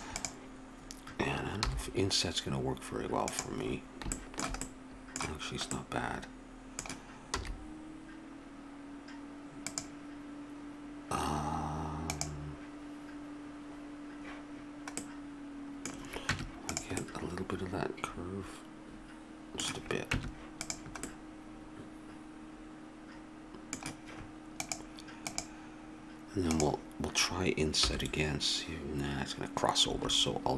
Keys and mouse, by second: 1.6 i, 7.4 e, 16.3 Tab, 17.0-18.9 middle drag, 20.1 Tab, 20.9-23.1 middle drag, 27.8 i.